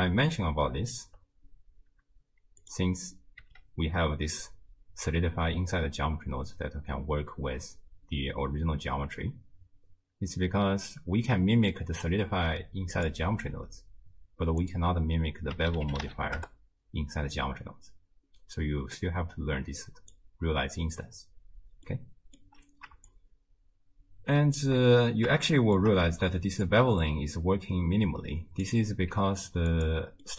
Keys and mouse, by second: 2.6 click, 3.4 m, 12.9 click, 14.8-16.4 drag, 19.0-20.2 drag, 22.1 middle click, 23.1-24.6 shift+drag, 25.6 shift+middle click, 26.7-28.7 drag, 29.1 z, 30.2-30.3 middle drag.